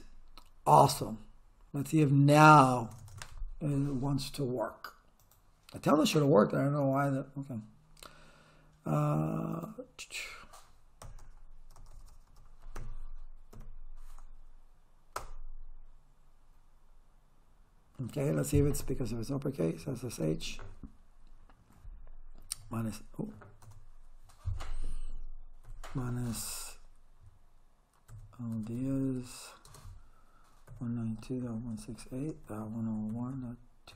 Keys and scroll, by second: 11.2 Return, 12.8 Up, 15.2 Return, 18.8 Caps_Lock, 19.8 s, 20.1 h, 20.3 space, 22.6 =, 23.6 BackSpace, 25.7 -, 27.9-33.9 typing.